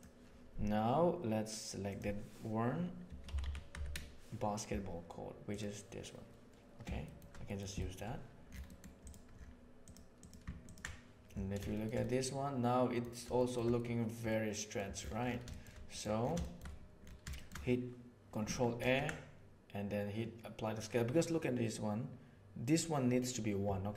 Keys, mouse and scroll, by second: 7.0 shift+middle click, 7.4 middle click, 7.7 shift+middle drag, 8.6 middle click, 8.9 click, 9.7 click, 10.1 click, 10.6 ctrl+shift+click, 11.7 shift+middle drag, 11.9-12.9 middle drag, 13.3 shift+middle drag, 14.2-14.7 middle drag, 15.4 shift+middle click, 15.9 middle click, 16.3 shift+middle drag, 17.3 shift+middle click, 18.7 ctrl+a, 23.8 ctrl+a.